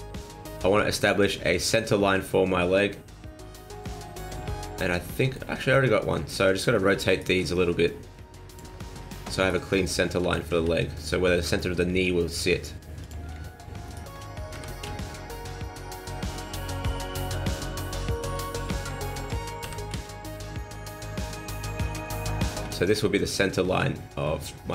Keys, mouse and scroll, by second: 0.2 shift+middle click, 0.7-1.7 scroll up 2, 3.1 middle click, 4.0 shift+middle click, 4.6 middle click, 5.5 shift+middle click, 6.4 shift+middle click, 7.1 alt+right click, 8.5 click, 9.4 alt+right click, 10.2 r, 13.9 alt+right click, 14.5 r, 18.5 shift+middle click, 19.1 alt+right click, 19.6 r, 22.0 shift+middle click, 22.8 shift+middle click.